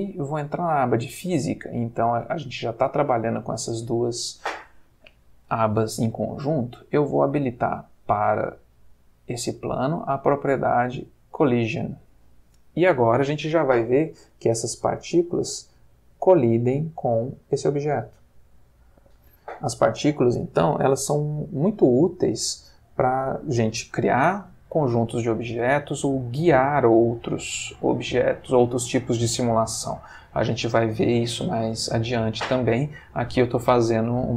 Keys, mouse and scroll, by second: 0.2 click, 10.8 click.